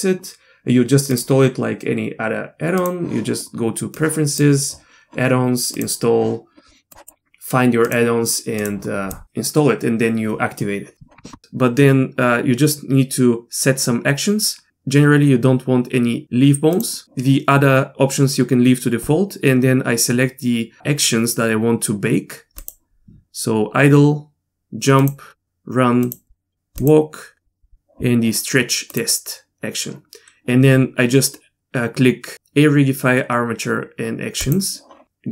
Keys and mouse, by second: 1.1-3.0 drag, 16.7 click, 22.6 click, 25.0 click, 26.1 click, 26.8 click, 28.9 click, 34.4-35.3 drag.